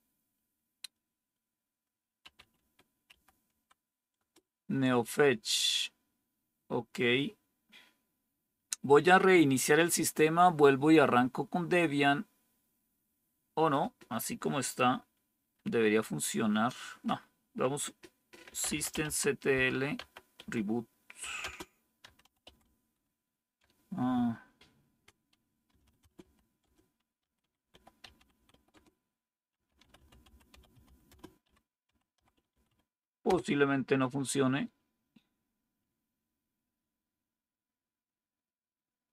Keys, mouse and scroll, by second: 1.9-4.0 typing, 18.3-33.2 typing.